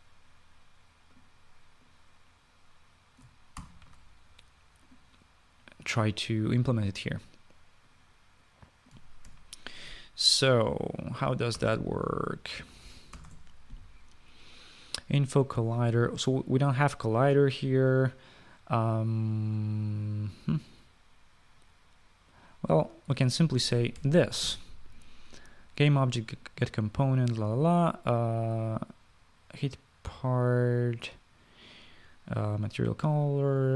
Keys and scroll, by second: 4.4 ctrl+x, 10.1 ctrl+v, 12.4 BackSpace, 12.5 BackSpace, 24.6-25.7 typing.